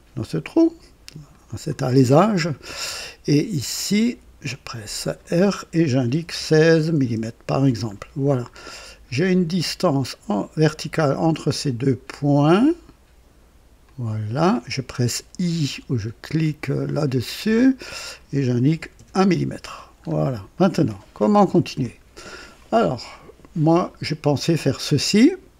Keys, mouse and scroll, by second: 1.2 click, 4.0 r, 6.0 KP_1, 6.3 KP_6, 6.3 KP_6, 7.0 Return, 7.3 Return, 8.2 scroll up 1, 8.7 right click, 11.0 click, 13.8 click, 17.4 i, 18.6 KP_1, 18.9 Return, 19.9 scroll up 1, 20.5-21.2 right drag, 21.3 scroll up 1, 21.8-22.3 right drag, 24.5 click.